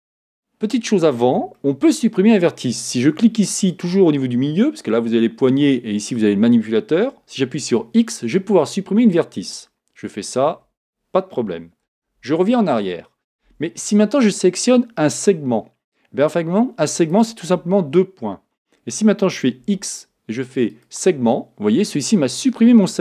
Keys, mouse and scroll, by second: 1.5-3.7 shift+middle drag, 3.7 click, 7.6 x, 11.9 z, 17.0 shift+click, 19.6 x.